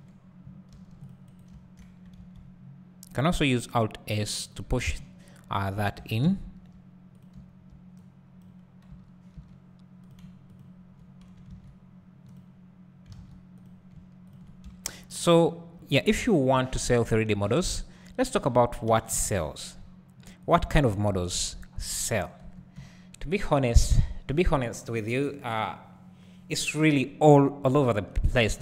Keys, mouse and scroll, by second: 0.7 ctrl+r, 1.6 `, 2.2 alt+s, 4.5 click, 4.7 Tab, 5.0 `, 6.1 Tab, 6.3 `, 7.3 click, 8.1-10.2 drag, 9.0 Tab, 11.6 alt+s, 12.4 click, 13.7 a, 18.9 r, 22.0-28.6 drag, 22.5 Tab, 24.1-28.3 scroll up 2.